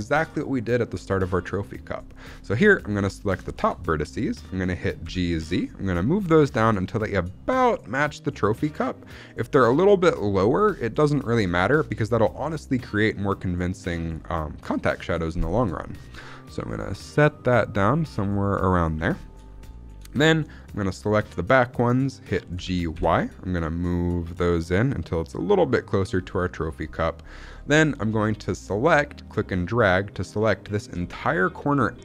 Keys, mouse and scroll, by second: 2.8 click, 3.4 shift+middle click, 4.2-4.9 scroll up 2, 4.9 g, 5.3 z, 18.6 click, 19.1 shift+middle click, 19.3 scroll down 1, 19.6 shift+middle click, 20.6 click, 22.7 g, 22.9 y, 26.7 click, 27.6 shift+middle click, 28.6-31.6 drag, 31.9 middle click.